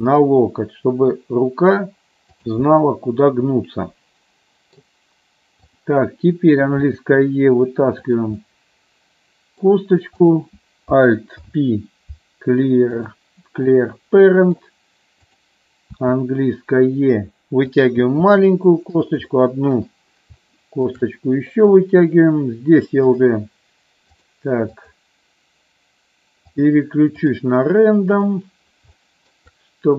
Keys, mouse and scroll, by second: 2.5 click, 2.8-5.1 middle drag, 6.9 e, 8.5-9.8 middle drag, 11.5 alt+p, 13.8 middle click, 16.1 e, 17.9 click, 18.2 e, 19.2 click, 19.5 middle click, 20.6 middle click, 21.2 middle click, 24.3 click, 24.9 click, 26.7 click, 27.3-28.6 drag, 29.2 shift+middle click.